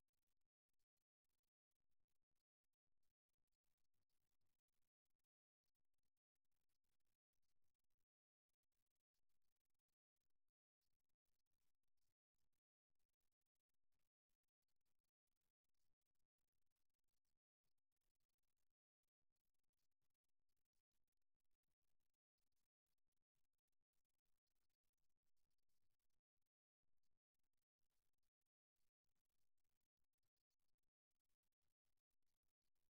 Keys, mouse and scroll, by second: 2.8-5.2 middle drag, 6.0-7.7 drag, 7.7-8.9 middle drag, 8.9-10.7 right drag, 10.7 middle click, 11.6 middle click, 11.8-13.4 drag, 14.0 middle click, 15.4-17.2 right drag, 18.6 middle click, 19.0 click, 19.8-21.5 middle drag, 21.5 click, 21.8-24.0 right drag, 24.0-25.4 drag, 25.4 right click, 25.9 middle click, 26.8 click, 27.5-28.7 drag, 27.5-28.5 right drag, 29.3-30.4 middle drag, 30.4-32.0 drag, 31.2 right click, 32.0-32.9 middle drag.